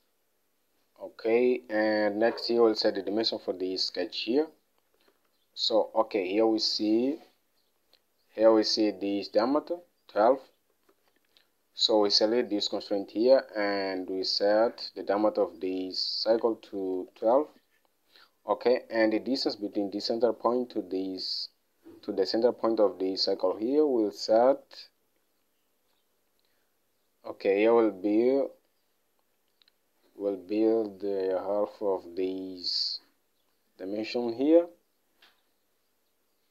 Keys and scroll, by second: 5.5 alt+Tab, 11.5 alt+Tab, 17.0-17.9 typing, 23.8 alt+Tab.